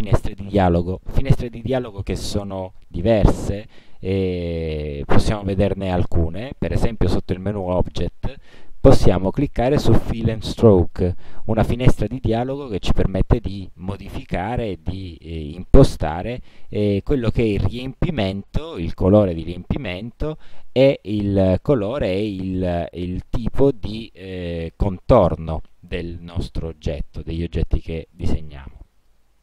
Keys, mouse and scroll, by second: 7.8 click, 11.0 click, 12.6 click, 15.5-16.5 drag, 21.4 click, 22.9 click, 28.5-29.4 drag.